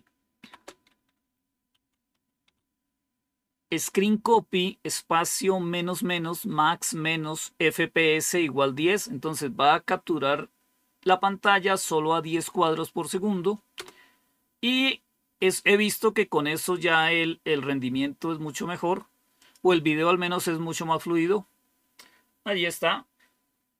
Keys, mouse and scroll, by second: 0.3 typing, 0.8 Delete, 1.4-3.0 typing, 19.3 click.